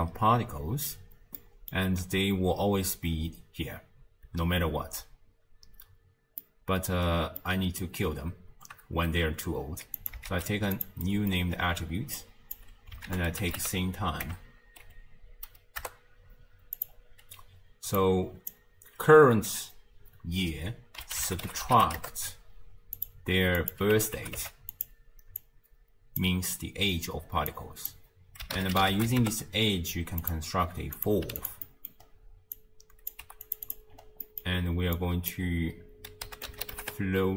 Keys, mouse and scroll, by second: 0.1-0.8 scroll down 1, 0.8 space, 1.4 middle click, 2.0 space, 4.3 space, 5.0 space, 5.7 space, 6.4 middle click, 7.1-7.4 scroll down 4, 7.4-10.0 middle drag, 10.0 click, 10.3 shift+d, 11.1 middle click, 11.3-12.2 scroll up 4, 12.2 click, 13.1 ctrl+a, 18.0 drag, 23.6-25.4 drag, 27.5 drag, 31.0 click, 31.7 middle click, 32.1-32.6 scroll down 3, 32.6 click, 33.2 g, 33.7 click, 33.9 scroll up 1, 34.2-35.0 middle drag, 35.0 drag.